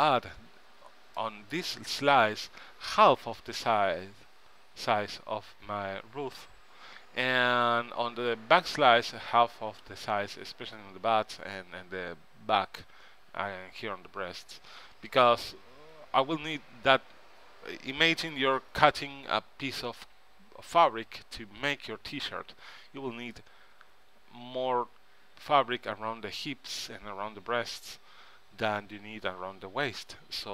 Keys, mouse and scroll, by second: 2.5 KP_1, 14.7 KP_3.